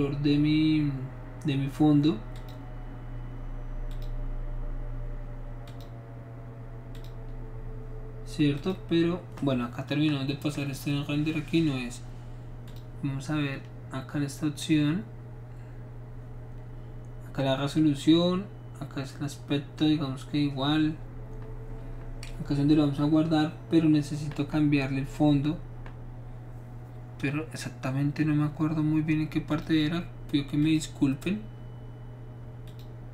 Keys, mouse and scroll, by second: 2.4 click, 3.9 click, 5.7 click, 7.0 click, 8.6 click, 12.7 click, 29.5 click, 30.6 click, 32.7 click.